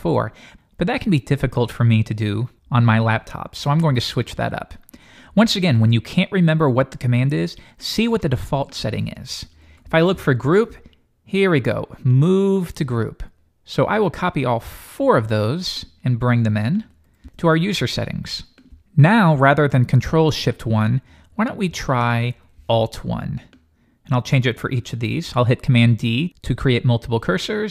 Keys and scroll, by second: 25.8 super+d.